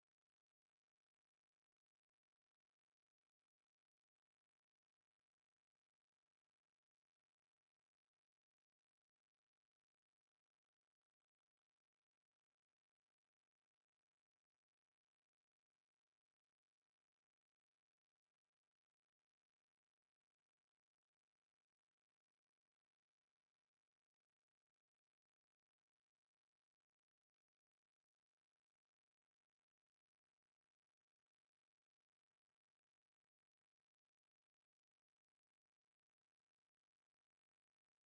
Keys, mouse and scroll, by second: 0.2 middle click, 0.9 KP_Enter, 0.9 Tab, 8.1 click, 9.1 KP_1, 10.2 KP_5, 10.8-12.4 middle drag, 12.4 click, 13.1 shift+a, 13.9 click, 19.8 r, 23.2 r, 27.2 Tab, 27.5 right click, 28.4 r, 30.9 right click, 33.2 space, 35.2 g, 37.2 r.